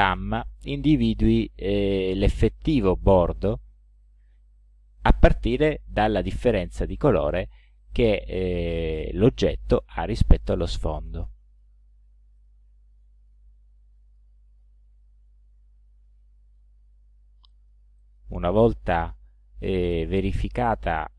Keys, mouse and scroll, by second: 0.9 click, 1.9 click, 3.1 click, 4.0 click, 5.0 click, 5.8 click, 7.0 click, 8.4 click, 9.5 click, 10.3 click, 11.5 click, 12.4 click, 13.2 click, 14.1 click, 15.0 ctrl+scroll up 2, 16.1 ctrl+click, 16.9 ctrl+scroll down 2, 17.5 ctrl+click, 18.0 ctrl+click, 19.8-20.1 scroll up 2, 20.2 scroll down 2, 20.8 ctrl+scroll up 2.